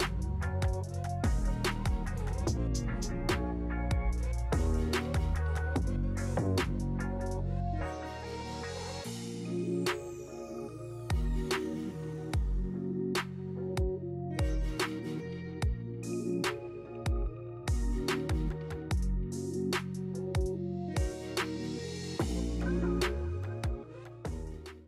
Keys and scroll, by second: 2.3 4, 2.6 5, 5.8 Escape.